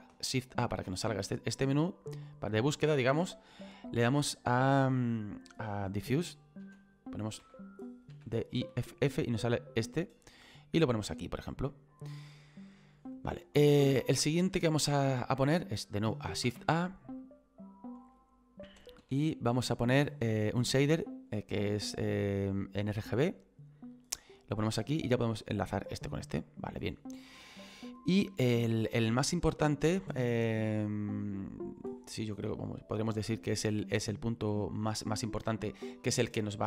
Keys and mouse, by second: 3.8 click, 10.2 click, 12.8 click, 17.2 click, 23.2 click, 24.5 click, 25.6 click.